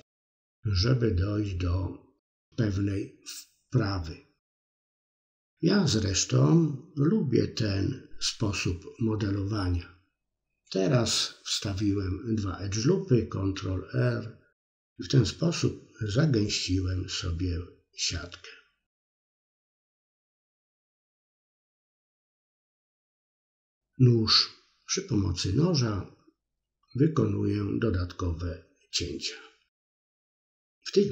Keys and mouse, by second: 0.2 middle click, 0.8 f, 0.9 middle click, 2.5 f, 2.6 middle click, 2.9-4.0 middle drag, 5.2 ctrl+r, 6.2 middle click, 8.0 click, 8.9 middle click, 9.2 click, 9.9 middle click, 10.5 click, 10.6 middle click, 10.9 click, 11.6 middle click, 12.5 click, 12.9-14.3 middle drag, 14.4 middle click, 15.6 ctrl+r, 16.2 middle click, 17.3 click, 17.7 middle click, 18.5 click, 19.4-21.1 middle drag, 21.7 middle click, 22.5 k, 24.9 middle click, 25.4 middle click, 26.2 k, 27.4-29.4 middle drag, 29.7 KP_3, 30.1 shift+middle click, 31.0 middle click.